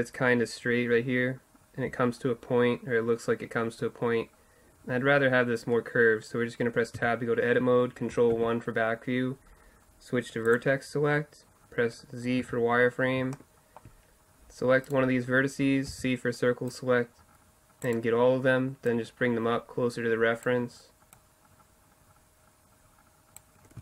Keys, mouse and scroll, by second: 6.0-7.0 middle drag, 7.0 Tab, 12.4 z, 13.4 click, 13.5-16.7 middle drag, 16.0 c, 18.9-20.6 drag, 21.2-22.9 drag.